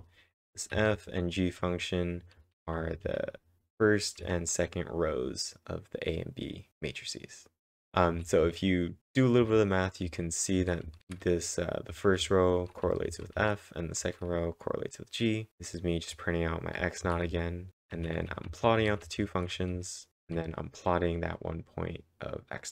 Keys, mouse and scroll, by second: 1.9-4.4 typing, 7.8-14.0 typing, 15.3-16.0 typing, 17.0-20.2 typing.